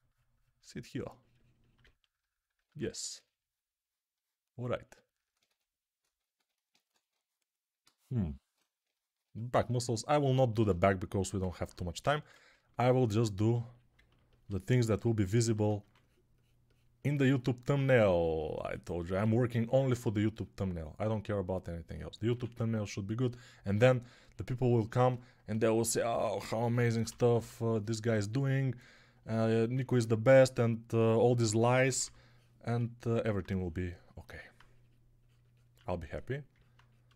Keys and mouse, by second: 2.5 1, 5.3 2, 6.6 1, 7.7 ctrl+z, 9.1-15.7 alt+drag, 9.1-15.7 alt+middle drag, 9.1-15.7 alt+right drag, 11.9 1, 15.7 2, 22.2 1, 26.5 g, 26.9 ], 27.1 ], 27.2 ], 30.3 1, 31.4 6, 31.7 [, 31.9 [, 35.6 1.